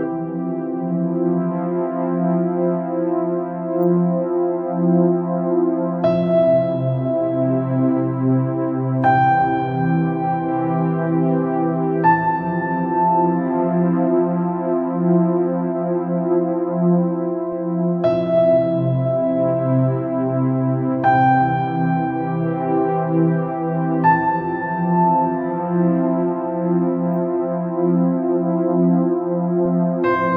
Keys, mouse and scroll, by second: 2.8-3.2 scroll down 3, 3.3 click, 3.8 scroll up 2, 4.1 scroll down 2, 4.3-5.3 middle drag, 5.3-5.8 scroll up 3, 5.8-6.1 scroll down 2, 6.1-7.7 middle drag, 7.7-8.0 scroll up 3, 8.0 scroll down 2, 8.2-11.2 middle drag, 11.5 ctrl+z, 11.9 ctrl+z, 13.2 alt+e, 16.6 click, 17.1 scroll down 2, 17.3-18.7 middle drag, 18.7-19.9 scroll up 2, 19.9 scroll down 1, 20.0 middle click, 20.6-21.2 scroll up 2, 21.4 alt+click, 23.4 alt+e, 30.2 scroll down 1.